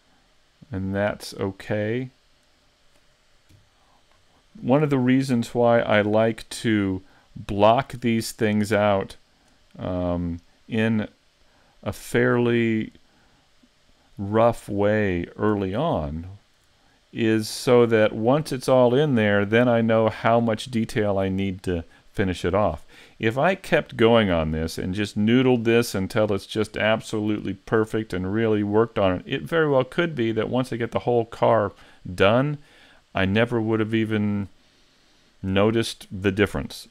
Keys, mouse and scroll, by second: 3.5 KP_5, 4.2-4.6 scroll down 4, 4.6 middle click, 5.4 shift+c, 6.3 shift+middle click, 6.9 middle click, 8.3 scroll up 4, 8.8 shift+middle click, 10.2 scroll down 1, 12.0 right click, 12.4 middle click, 14.7-15.3 scroll down 6, 15.6 a, 15.8-16.3 scroll up 3, 16.3 shift+middle click, 16.8 middle click, 17.5 shift+middle click.